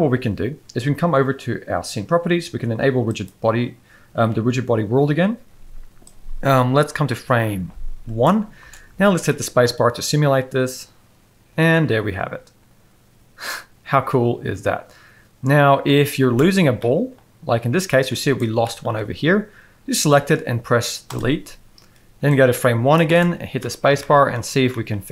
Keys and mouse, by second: 3.1 click, 6.1-8.3 drag, 8.6 space, 9.2-9.6 middle drag, 16.2 space, 16.8-17.1 middle drag, 18.2 drag, 18.6 shift+middle drag, 20.1 x, 22.3 click, 23.1 space, 23.6 middle click, 24.0 shift+middle drag, 24.7 shift+middle drag.